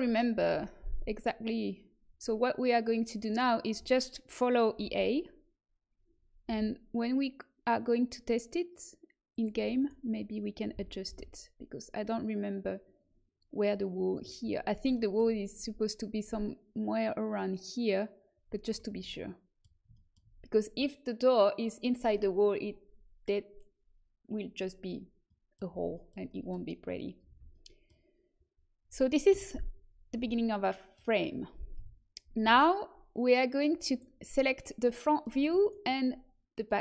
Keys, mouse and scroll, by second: 0.2 middle click, 0.4 z, 2.0-3.2 drag, 3.2 middle click, 3.9 right click, 4.8 g, 9.7-11.4 right drag, 10.7 g, 18.9 z, 25.2-27.2 middle drag, 27.2 a, 27.7-29.2 middle drag, 29.2 KP_1, 30.1 z, 31.7 KP_1, 32.4 z, 33.8-34.9 middle drag.